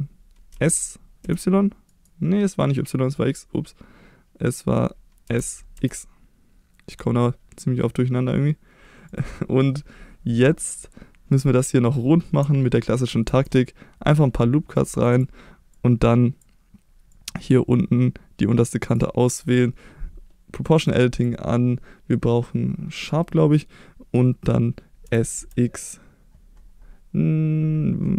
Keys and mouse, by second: 0.5 s, 1.2 y, 1.9 right click, 5.2 s, 5.7 x, 9.1 click, 13.3 ctrl+r, 15.1 click, 15.9 click, 17.3-18.9 drag, 20.8 click, 21.1-23.2 drag, 25.0 s, 25.3 x.